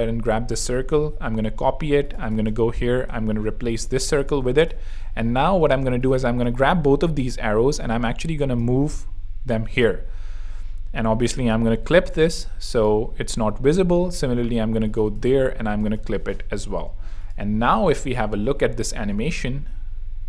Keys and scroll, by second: 0.7 super+c, 3.1 shift+super+r, 4.1 shift+super+z, 5.0 super+z, 7.0 shift+Right, 17.9 super+3, 18.4 super+r, 18.9 r.